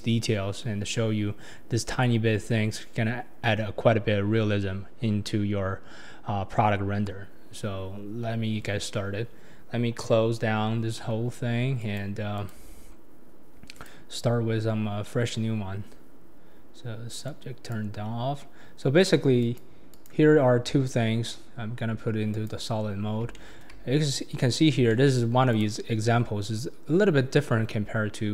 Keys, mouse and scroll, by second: 0.1-1.2 drag, 0.1-1.2 middle drag, 0.1-1.2 right drag, 1.3 click, 1.3 middle click, 1.3 right click, 4.8-5.8 scroll down 6, 6.5-7.7 scroll down 7, 7.3 middle click, 11.8 click, 12.3 click, 12.5-13.6 drag, 15.0 scroll up 3, 17.2-20.0 drag, 20.4-21.1 scroll up 4, 21.1-22.4 scroll up 1, 22.4 click, 23.0 scroll up 2, 23.3-24.0 shift+middle drag, 24.0 scroll up 2, 24.5 scroll down 3, 24.9-25.5 shift+middle drag, 25.5 click, 25.9-27.5 scroll up 3.